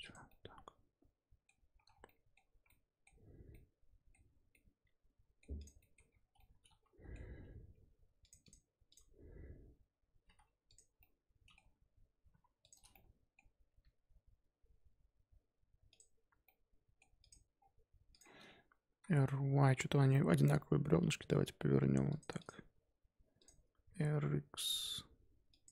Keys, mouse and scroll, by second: 0.2-1.8 middle drag, 1.8 scroll down 4, 2.0-5.5 middle drag, 5.5 click, 5.8 shift+middle drag, 6.0 scroll up 1, 6.3-8.2 middle drag, 8.2 click, 8.4-10.2 drag, 10.2 g, 11.0-12.2 middle drag, 12.2 g, 12.9-13.7 middle drag, 13.7 s, 16.4-17.2 middle drag, 17.2 click, 17.5-18.1 scroll down 4, 18.1 click, 18.5-18.8 scroll up 1, 18.8 r, 22.3 click, 23.4 click, 23.8 r.